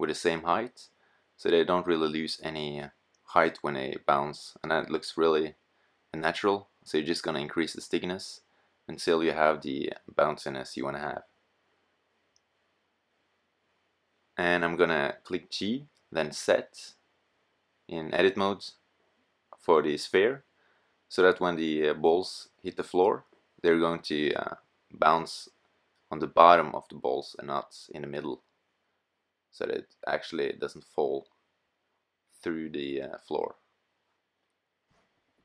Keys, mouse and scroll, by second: 1.4-3.2 drag, 3.2-4.3 middle drag, 7.6 middle click, 9.4-11.5 drag, 11.9-12.3 drag, 12.9 typing, 14.2 middle click, 15.1 g, 17.7 click, 20.8-22.3 middle drag, 29.5 middle click.